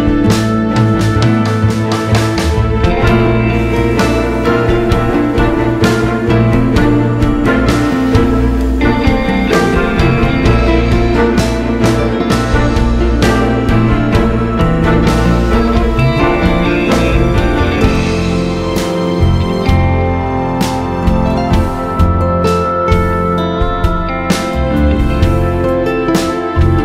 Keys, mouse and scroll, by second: 0.2 Tab, 0.4-0.7 scroll down 1, 0.7 Tab, 1.1 click, 2.8 ctrl+e, 3.0 click, 3.1 Tab, 4.3 alt+click, 5.6 ctrl+e, 6.0 Tab, 6.4 scroll up 1, 6.6-7.0 scroll down 1, 7.0 click, 8.5 ctrl+e, 8.8 Tab, 9.0-9.9 scroll down 1, 9.9 click, 10.2 scroll up 1, 10.4 Tab, 12.0 ctrl+e, 12.3 Tab, 14.3 Tab, 14.6 click, 16.0 ctrl+e, 16.2 Tab, 16.4 `, 17.0 KP_7, 17.8 scroll up 1, 18.6 Tab, 21.5 click, 22.4 ctrl+e, 22.7 Tab, 23.0 scroll down 1, 23.1 `, 23.7 Tab, 24.2 alt+click, 25.0 ctrl+e, 25.3 alt+a, 25.5 scroll down 1, 25.6 `, 25.9 scroll up 1, 26.3 Tab, 26.6 `.